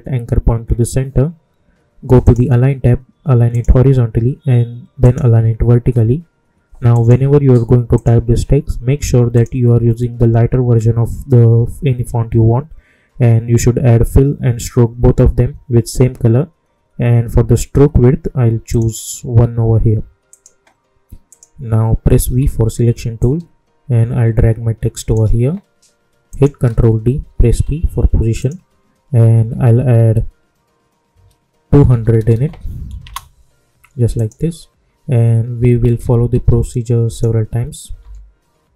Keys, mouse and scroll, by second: 2.2 click, 18.6 click, 22.2 v, 23.1-26.2 drag, 26.6 ctrl+d, 27.5 p, 28.3 click, 29.4 Right, 33.0 Return, 34.1 click, 35.8 ctrl+d, 36.3 p, 37.0 click, 38.0 Right.